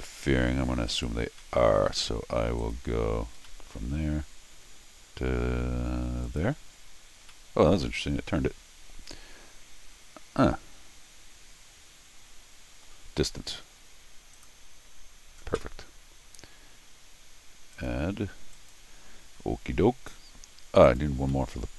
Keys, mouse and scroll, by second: 0.9 click, 1.4 middle click, 2.6 click, 3.5 middle click, 6.2 click, 7.3-12.8 middle drag, 14.3 click, 17.7 click, 18.5 click, 20.8 click, 21.3 middle click.